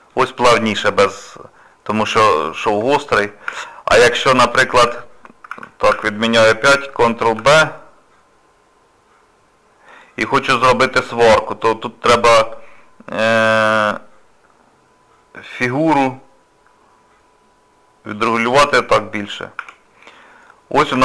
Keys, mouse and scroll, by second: 0.6 shift+middle click, 1.3 middle click, 2.4 shift+middle click, 2.9 middle click, 3.5 Tab, 4.0 shift+middle click, 4.8 ctrl+z, 5.9 ctrl+z, 18.5 Tab, 19.3 scroll down 1, 19.6 Tab, 20.2 middle click, 20.7 scroll down 2.